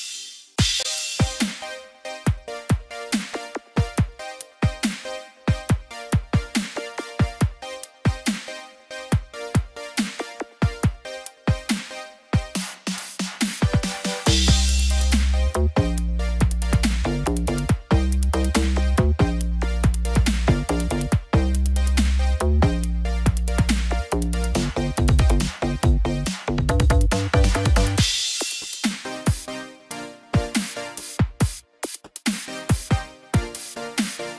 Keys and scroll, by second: 12.0 ctrl+z, 15.5 ctrl+0, 18.0 ctrl+j, 28.5 ctrl+z.